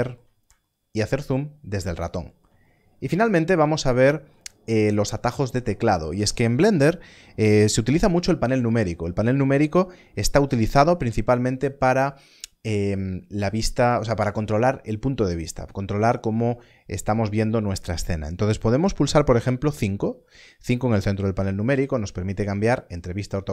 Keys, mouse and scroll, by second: 23.4 KP_5, 23.4 KP_5.